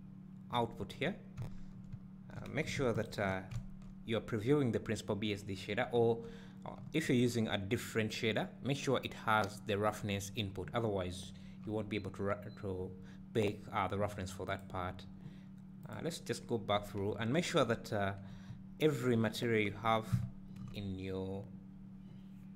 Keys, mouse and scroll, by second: 3.0 ctrl+shift+click, 14.5 click, 15.8 click, 18.5 `.